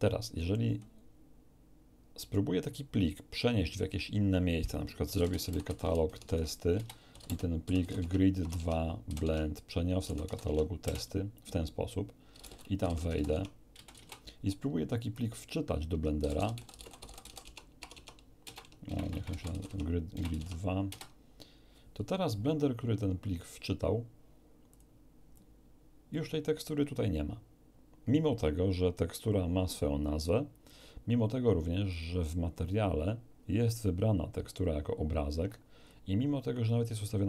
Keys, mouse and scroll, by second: 5.0-10.2 typing, 6.7 Return, 8.0 Tab, 8.5 Tab, 9.2 Tab, 10.4 Tab, 10.8 Return, 12.3-13.9 typing, 13.3 Tab, 13.7 Return, 13.9 Return, 16.2-20.3 typing, 17.4 Tab, 17.9 Tab, 19.7 Tab, 20.3 Tab, 20.9 Return, 24.7 click, 25.3-26.3 drag, 31.9 click, 35.0-36.1 scroll down 6.